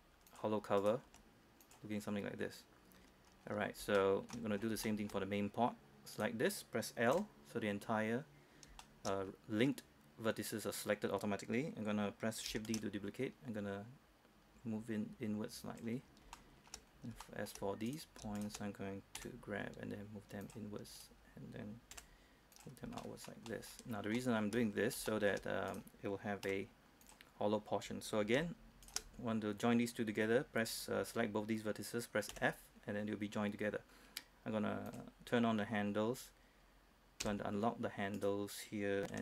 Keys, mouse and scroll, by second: 0.4 click, 0.9 right click, 1.2 g, 1.8 click, 3.1 scroll down 1, 3.4 scroll up 1, 3.6-3.9 scroll down 1, 4.1 shift+middle click, 4.5-4.9 scroll down 1, 5.0 shift+middle click, 5.3 scroll up 1, 5.5-6.3 scroll down 1, 6.3 right click, 7.3 l, 9.0 shift+middle click, 10.3-10.8 scroll up 1, 12.8 shift+d, 15.8 click, 16.2 scroll up 1, 16.5 shift+middle click, 17.1 scroll up 1, 17.4 shift+middle click, 18.0 right click, 19.3 shift+right click, 19.3 g, 20.6 click, 21.1 right click, 22.1 g, 22.7 click, 23.1 shift+middle click, 23.6 shift+middle click, 24.0-24.3 shift+scroll down 1, 24.3 shift+middle click, 24.8 scroll up 1, 25.2 shift+middle click, 25.8 right click, 26.6 g, 27.2 click, 29.0 shift+right click, 32.5 f, 32.9-33.7 scroll down 1, 33.7-34.5 scroll up 1, 35.0 click, 35.5-35.8 scroll up 1, 35.8-37.4 scroll down 1, 37.4 h, 37.8-38.3 scroll up 1, 38.3 right click.